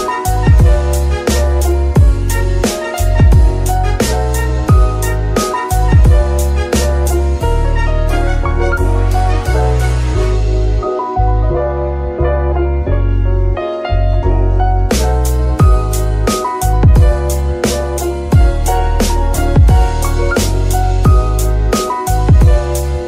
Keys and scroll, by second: 4.1 KP_3, 5.6 g, 11.0 g, 11.3 x, 12.7 z.